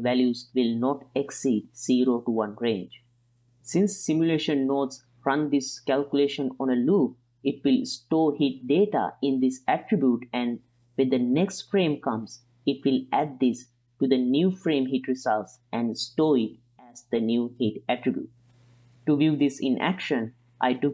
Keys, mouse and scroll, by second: 0.0 click, 6.1-7.2 middle drag, 10.4 right click, 10.7-11.5 drag, 13.1-13.9 middle drag, 16.3 click, 17.4 shift+d, 18.9-19.5 middle drag, 20.0-20.5 drag.